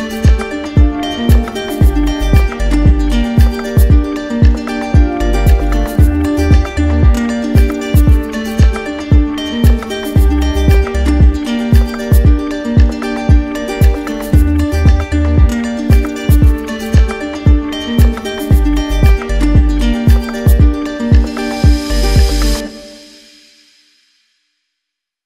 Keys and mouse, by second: 0.5 click, 0.5 right click, 0.9 alt+right click, 2.4 alt+right click, 3.0 right click, 4.7 right click, 7.8 right click, 8.5 right click, 9.0 right click, 10.6 z, 12.0 click, 13.0 click, 13.1 right click, 15.1-16.2 drag, 17.7-18.7 drag, 19.0 right click, 20.0 right click, 24.7 click.